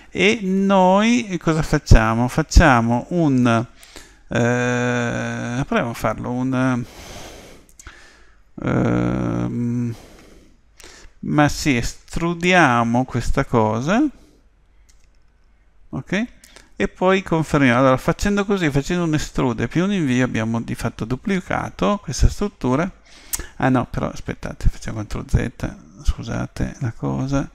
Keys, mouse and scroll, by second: 14.9 e, 25.1 ctrl+z.